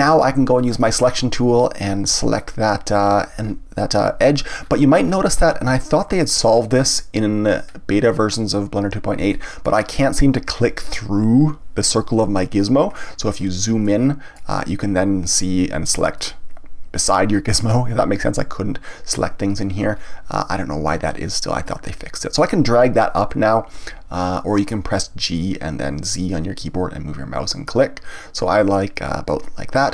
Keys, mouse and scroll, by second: 0.8 click, 2.4 click, 3.0-3.5 scroll up 1, 3.5-4.5 scroll down 1, 4.5 scroll up 1, 4.6-5.0 scroll down 1, 5.0 scroll up 1, 5.3-5.8 scroll down 1, 5.8-7.4 shift+middle drag, 7.4-9.3 scroll up 2, 9.3-12.3 shift+middle drag, 12.9-13.8 scroll up 2, 13.8-16.2 middle drag, 16.2 click, 19.9-21.6 scroll down 1, 21.6-24.6 drag, 29.8-29.9 middle drag.